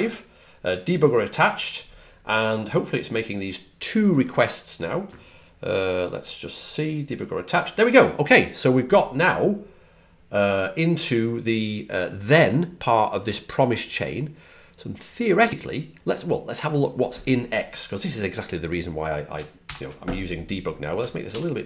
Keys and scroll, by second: 21.2 super+=.